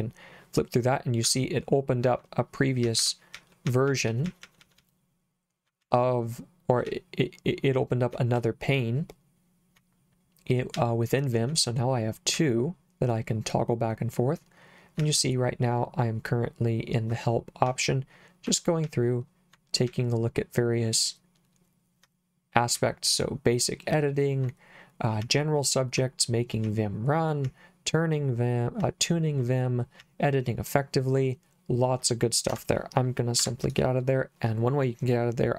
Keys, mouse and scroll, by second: 0.8 h, 1.3 h, 2.1 j, 2.9 Escape, 3.4-4.8 typing, 5.8 k, 6.9 j, 8.4 j, 10.8 j, 12.4 k, 15.0 j, 17.7 j, 18.9 j, 19.9 j, 22.8 k, 25.3 k, 26.7 k, 27.5 k, 28.9 k, 30.0 k, 32.6 Escape, 33.5 Escape.